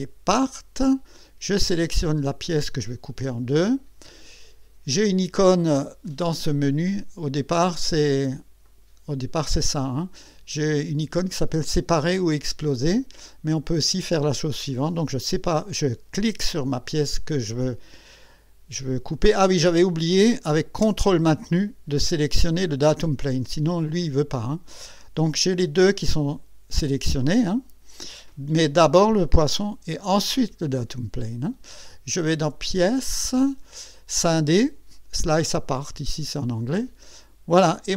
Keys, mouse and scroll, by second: 0.3 click, 2.4 click, 6.0 click, 8.6 click, 10.7 click, 13.0 click, 22.8 ctrl+click, 33.0 click, 36.6 click.